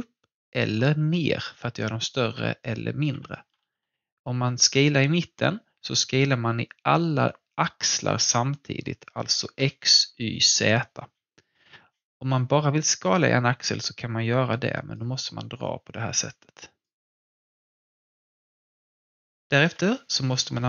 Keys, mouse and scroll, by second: 3.5 ctrl+z, 13.2-18.8 drag, 18.8 alt+click, 19.6 w.